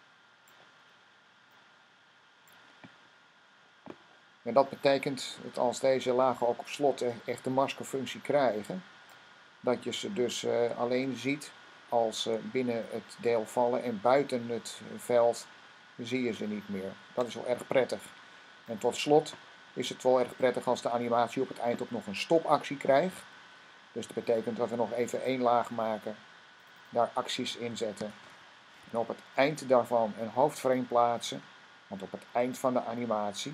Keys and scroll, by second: 27.4-29.3 typing.